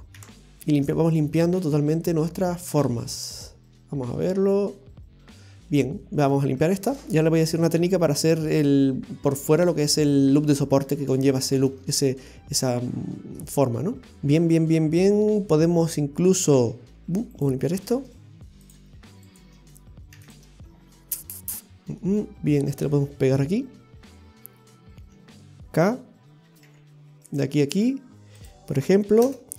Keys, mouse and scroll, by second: 0.2 i, 0.8-1.1 scroll up 1, 1.1-1.5 scroll down 3, 3.4 middle click, 7.1 middle click, 10.8-11.6 scroll down 2, 11.6 shift+middle click, 11.7-12.1 scroll up 4, 12.3 middle click, 14.0 shift+middle click, 14.0 scroll down 2, 16.9 middle click, 18.6 click, 19.2 right click, 20.1 x, 22.0 middle click.